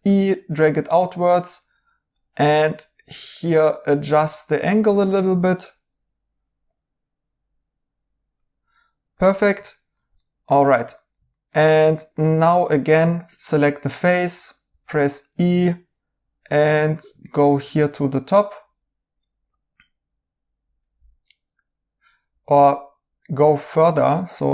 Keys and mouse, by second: 9.6 right click, 17.2 right click.